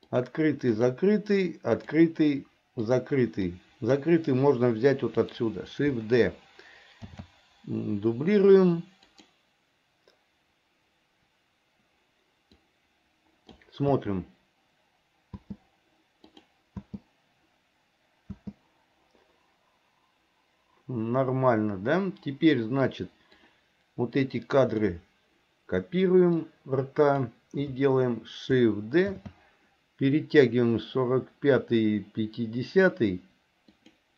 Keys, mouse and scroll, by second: 0.3 click, 0.9 click, 1.9 click, 3.0 click, 3.5 click, 3.7 click, 7.2 shift+d, 12.7-13.7 drag, 14.0 space, 15.4 space, 16.4 click, 18.4 space, 23.5-24.9 drag, 26.5 click, 29.3 shift+d.